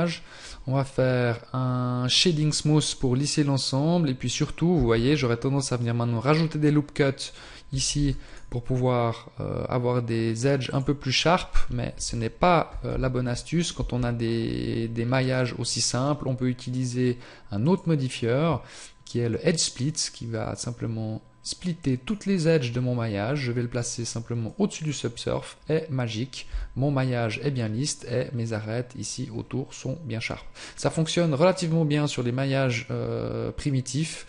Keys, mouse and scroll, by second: 2.1 click, 4.7 Tab, 7.9 ctrl+r, 11.9 ctrl+z, 12.9 Tab, 13.7 Tab, 15.1 scroll down 1, 16.6 click, 24.4 click, 26.5 Tab, 27.6 scroll up 1, 30.5 middle click.